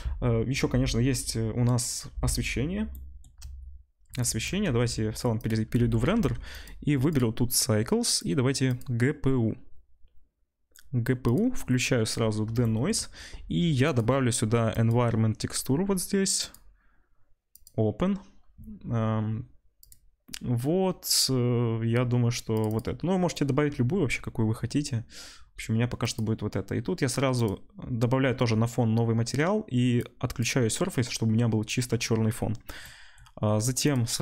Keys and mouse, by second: 4.7 z, 5.5-6.5 middle drag, 6.3 ctrl+s, 6.5-11.3 drag, 11.3-13.9 middle drag, 13.9 click, 14.0 middle click, 14.7-22.8 drag, 22.8-26.0 middle drag, 26.0 click, 26.2-27.4 middle drag, 27.4-31.8 drag, 31.8-33.8 middle drag, 33.8 click, 33.9-34.2 middle drag.